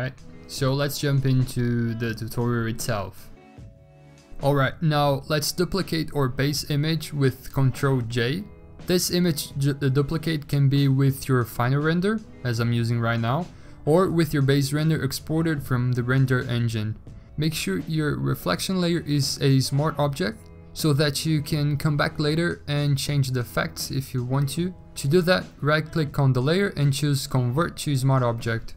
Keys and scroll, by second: 1.5-2.3 typing, 7.3 ctrl+j.